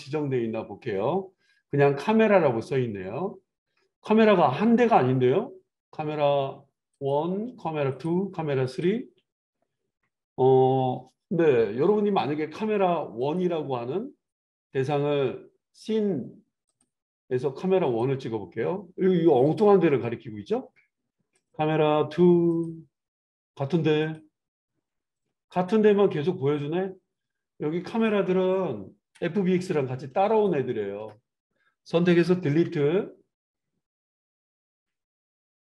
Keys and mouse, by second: 6.9 click, 7.1-7.7 middle drag, 8.0 click, 13.2 click, 16.4 middle click, 16.6-28.0 drag, 28.0-30.3 middle drag, 30.3 shift+click, 30.5-35.7 shift+middle drag, 32.5 Delete.